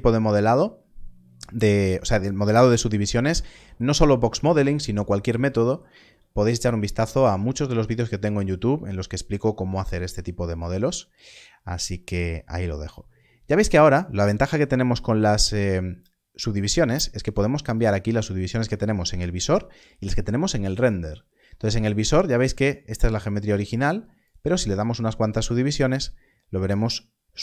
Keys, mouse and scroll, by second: 2.7 alt+a, 2.7 click, 5.9 alt+a, 6.3-6.6 scroll up 1, 10.4 click, 13.0-13.8 scroll up 1, 17.2 click.